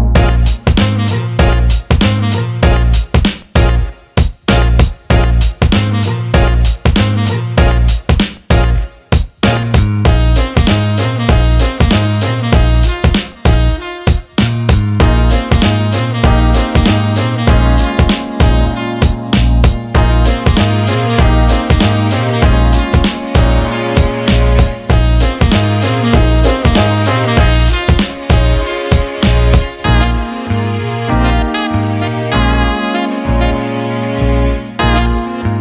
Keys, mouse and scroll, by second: 4.3-6.2 alt+middle drag, 7.0 click, 8.5 alt+middle click, 9.1 middle click, 9.4 alt+shift+middle click, 10.1 alt+middle click, 11.3 click, 12.0 alt+shift+middle click, 15.3 click, 17.8 click, 18.6 click, 19.2 alt+shift+middle click, 22.4 click, 23.4 alt+shift+middle click, 24.5-28.0 drag, 29.6-35.6 drag.